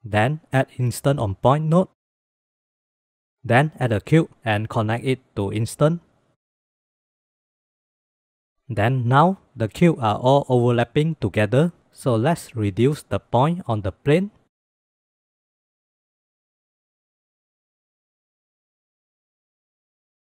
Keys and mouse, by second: 0.4 shift+a, 3.5 shift+a, 6.1-7.1 drag, 7.3-8.1 drag, 13.3 drag, 14.0 click, 14.6-15.4 drag, 15.5 click, 15.9-16.3 drag, 17.2-19.9 drag, 19.2 KP_0, 20.2-20.3 middle drag.